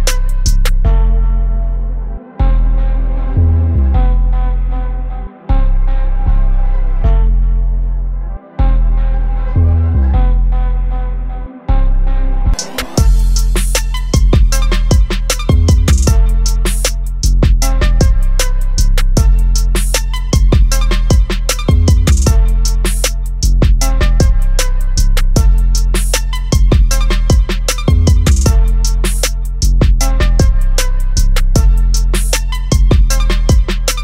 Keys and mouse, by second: 4.7 click, 13.9 click, 16.5 ctrl+t, 17.2 alt+click, 19.5 Return, 20.5 click, 22.5 click, 26.4 click, 31.6 click.